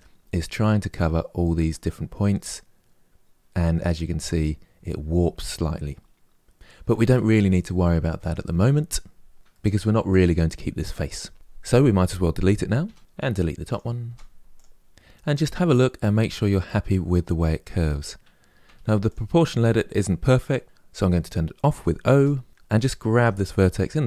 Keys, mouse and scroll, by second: 1.9-4.9 middle drag, 9.3-11.3 middle drag, 11.3 click, 12.5 Delete, 13.0 middle click, 13.4 click, 13.7 Delete, 14.7-16.2 middle drag, 18.3 1, 18.7 click, 21.8 o, 22.5 g, 22.9 g.